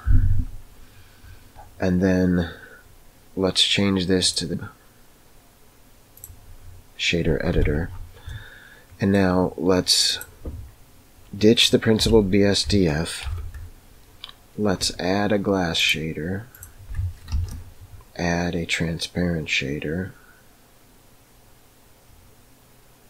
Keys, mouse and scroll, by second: 4.1-6.2 drag, 7.5 n, 8.4 middle click, 12.0 x, 13.2 shift+a, 17.2 shift+a.